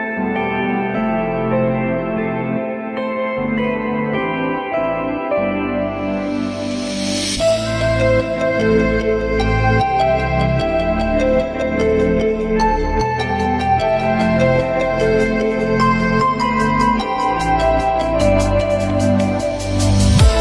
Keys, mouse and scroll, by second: 0.1 F3, 0.8 F3, 2.9 r, 10.0 F3, 10.9 alt+click, 11.7 alt+click, 12.4 F3, 13.7 ü, 14.4 alt+middle click, 16.2 shift+click.